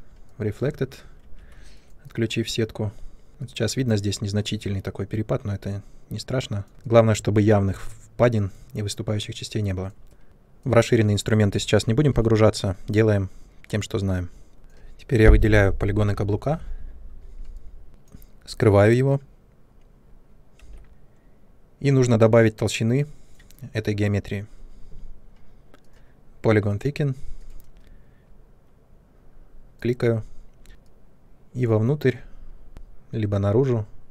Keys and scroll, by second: 1.2 ctrl+1, 12.0 3, 15.9 shift+Up, 20.6 h.